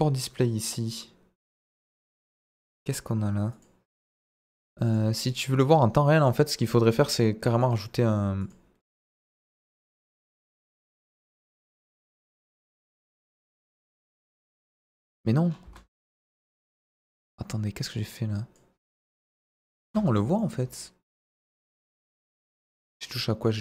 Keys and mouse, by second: 1.7 click, 3.5 click, 4.1 click, 4.9 click, 5.3 click, 6.2 click, 7.5 click, 8.5 click, 10.4 click, 14.5 click, 15.6 space, 16.7-17.2 middle drag, 18.0 click, 19.8 space, 20.0-20.4 middle drag.